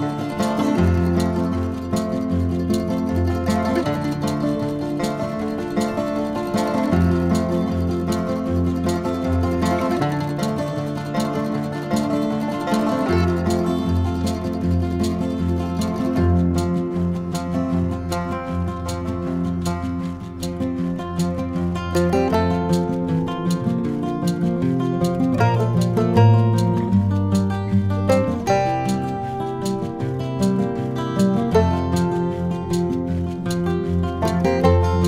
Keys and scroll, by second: 5.9 ctrl+j, 6.1 ctrl+-, 16.9 ctrl+x, 17.4 ctrl+v, 18.5 ctrl+-, 19.5 ctrl++, 22.5 ctrl+-, 34.9 ctrl++.